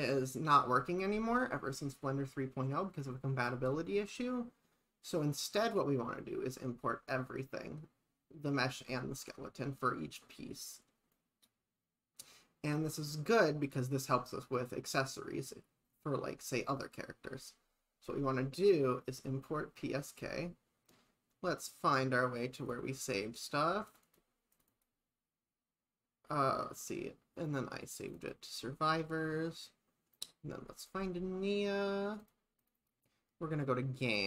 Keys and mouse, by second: 5.1 click, 11.1 click.